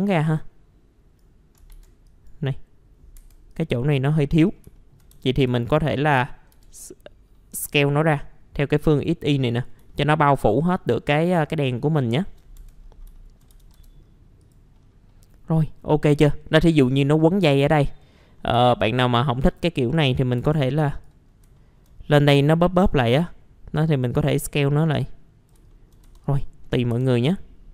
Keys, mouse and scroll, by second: 0.3 click, 1.7 ctrl+z, 2.0 click, 3.2 F4, 3.5 click, 4.7 alt+middle click, 6.1 alt+middle click, 7.8-8.8 alt+middle drag, 8.9 click, 9.9-12.3 alt+middle drag, 12.6 F4, 12.8-13.1 scroll down 1, 13.2 alt+middle click, 14.0-14.4 scroll down 1, 14.4 click, 14.7 scroll down 1, 14.7 middle click, 16.0-17.4 scroll up 1, 17.4 click, 18.5 F4, 19.7-21.3 drag, 21.3 scroll up 1, 21.5 alt+middle click, 23.1-25.6 drag, 25.7 alt+middle click, 26.2 click, 26.6 middle click, 26.7 scroll down 1, 26.9 F4, 27.3-27.7 scroll up 1.